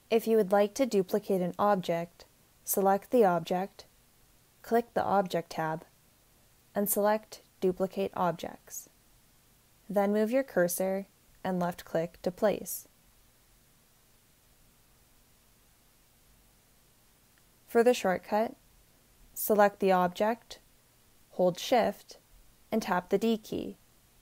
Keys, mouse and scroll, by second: 11.5-13.8 drag, 21.7 shift+d.